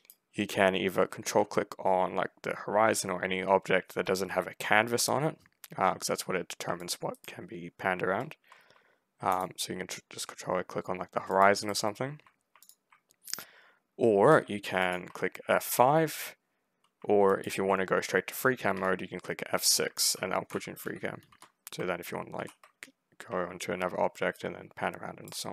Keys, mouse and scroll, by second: 6.7 ctrl+click, 7.0 ctrl+right click, 7.5 ctrl+scroll down 2, 9.2 ctrl+click, 11.2 ctrl+click, 11.5 ctrl+right click, 11.9 ctrl+middle click, 12.5 ctrl+click, 14.7 ctrl+click, 15.5 F5, 17.2 ctrl+click, 18.6 F6, 19.9 ctrl+right click, 20.0 ctrl+w, 20.2-21.1 typing, 22.2 ctrl+f, 24.2 alt+right click.